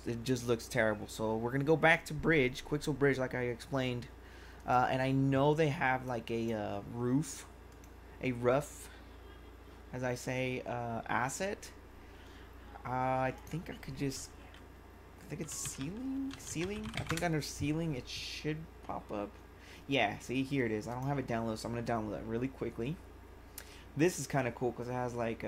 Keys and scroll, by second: 15.2-17.4 typing.